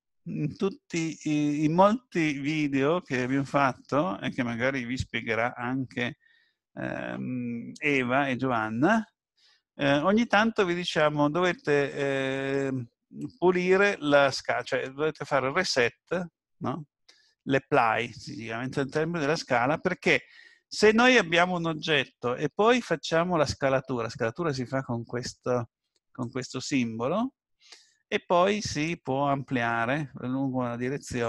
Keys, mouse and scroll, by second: 26.2 click, 28.9 click.